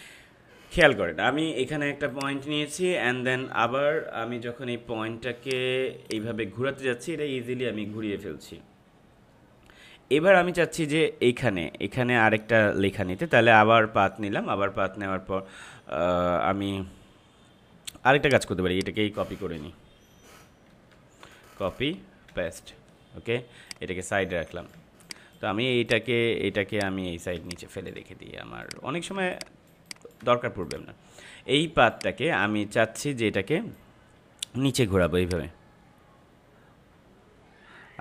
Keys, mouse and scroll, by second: 5.4 click, 18.1 click, 20.6 ctrl+c, 22.2 ctrl+v, 23.6 click, 24.7 space, 25.0 click, 25.2 space, 25.8 click, 27.3 space, 27.4 click, 27.8 space, 28.6 click, 29.1 space, 29.3 click, 29.6 space, 29.8 click, 29.9 space, 30.6-38.0 drag.